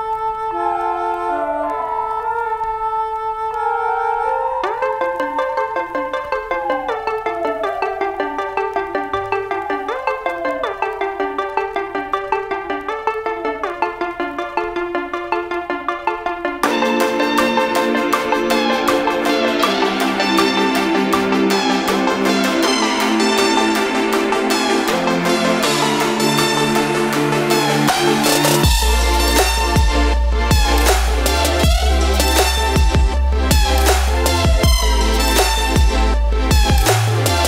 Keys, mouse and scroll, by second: 0.3 space, 0.7 click, 4.7 click, 8.9 scroll down 1, 13.5 space, 13.5 click, 13.6 space, 14.0 click, 17.4 scroll down 1, 17.8 click, 18.4 click, 20.6 click, 21.6 scroll down 1, 22.3 Right, 22.5 click, 23.0 Left, 23.2 click, 26.4 space, 26.5 click, 26.5 space, 27.0 click, 29.8 space, 29.8 click, 30.1 space, 30.5 click, 32.9 click, 33.0 space, 33.4 click, 36.5 space.